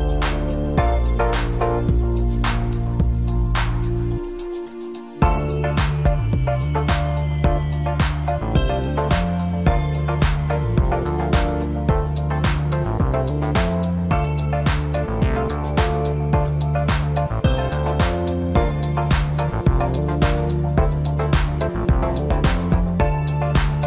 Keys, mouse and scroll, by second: 2.8-4.7 middle drag, 4.7 scroll up 1, 5.7 g, 7.9 scroll down 2, 8.6 KP_1, 9.7-11.1 middle drag, 11.1-11.8 scroll up 6, 11.8-12.4 scroll down 7, 12.4-15.5 middle drag, 16.1-16.4 scroll down 1, 16.4-17.6 middle drag, 17.6 KP_1, 19.1-22.2 drag, 22.5 g.